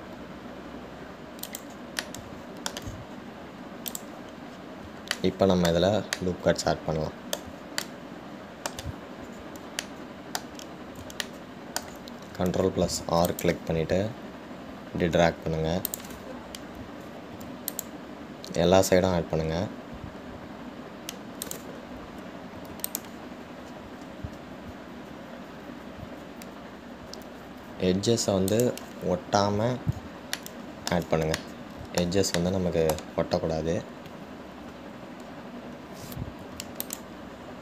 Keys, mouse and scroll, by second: 3.2-5.1 middle drag, 5.1 click, 5.8-6.4 scroll down 1, 6.4-14.0 shift+middle drag, 14.0 ctrl+r, 30.7-31.6 scroll down 1, 31.6-34.9 shift+middle drag, 34.9-36.6 scroll up 3, 36.6-37.6 scroll down 1.